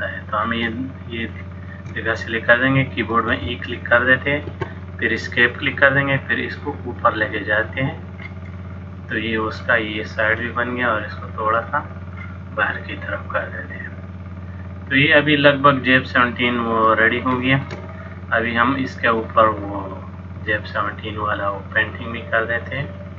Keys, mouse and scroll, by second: 0.3 click, 1.4 shift+click, 1.7 shift+click, 4.3 e, 5.7 click, 8.6 middle click, 10.5 click, 12.7 middle click, 17.4 shift+middle click, 18.1 middle click.